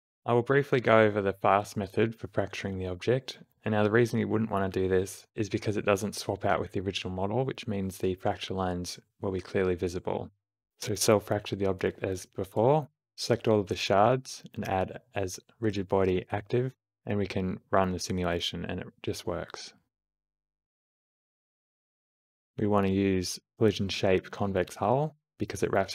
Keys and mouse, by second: 0.0 shift+Left, 0.0 g, 0.0 space, 3.2-4.3 drag, 3.2-5.3 d, 4.9 click, 5.5-7.4 middle drag, 7.6-8.9 middle drag, 9.1-10.6 middle drag, 13.1 g, 15.7 q, 20.5 space, 22.7 space, 23.1 shift+Left, 24.0 click, 24.6 g, 25.7 click.